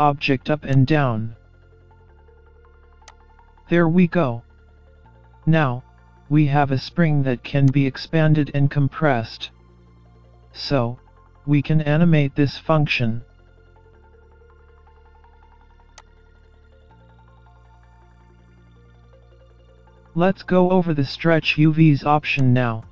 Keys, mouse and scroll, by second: 0.8 click, 3.1 click, 5.8-6.6 scroll down 3, 6.6 middle click, 6.6 scroll down 1, 7.7 click, 14.6 middle click, 16.0 click, 21.2 shift+a.